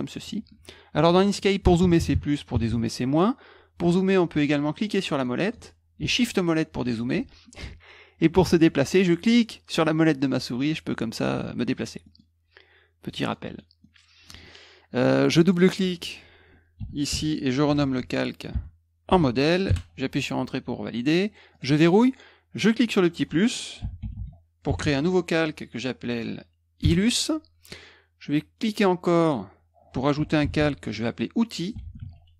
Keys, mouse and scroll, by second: 4.8 middle click, 5.1 middle click, 5.4 middle click, 6.2 shift+middle click, 9.4-11.8 middle drag, 12.0 middle click, 13.0 middle click, 13.4 middle click, 13.8 middle click, 15.4 click, 15.5 click, 16.7-19.6 typing, 21.5 click, 22.5 click, 23.5-25.3 typing, 26.8 Return, 28.6 click, 29.9-32.3 typing.